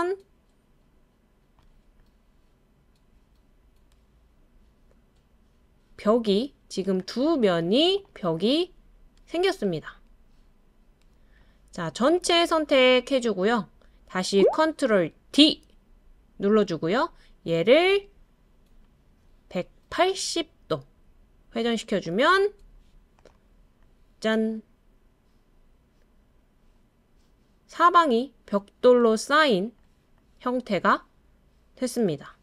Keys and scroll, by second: 15.3 super+d.